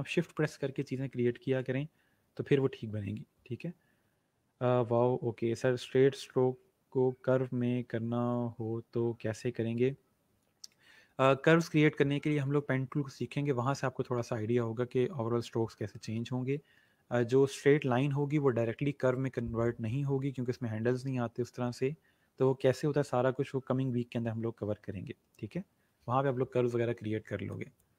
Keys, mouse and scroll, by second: 27.4 click.